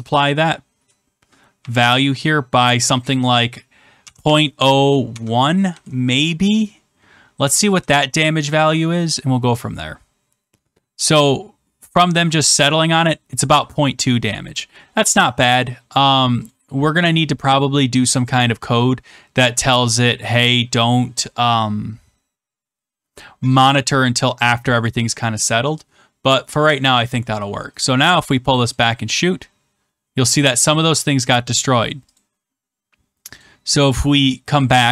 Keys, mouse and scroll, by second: 3.7-6.0 typing, 8.5 click, 16.4-17.6 drag, 26.7-27.8 drag, 28.6-29.8 drag, 32.1 click, 33.3 click.